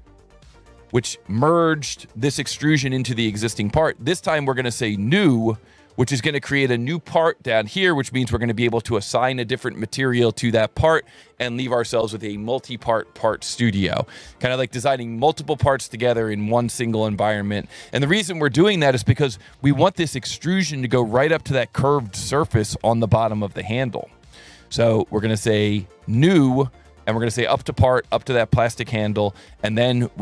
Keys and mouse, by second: 0.2 alt+1, 1.3 click, 3.5 alt+`, 3.5 alt+1, 5.1 click, 6.6 click, 7.9 click, 8.7 ctrl+shift+click, 13.9 alt+1, 28.1 click, 28.9 click.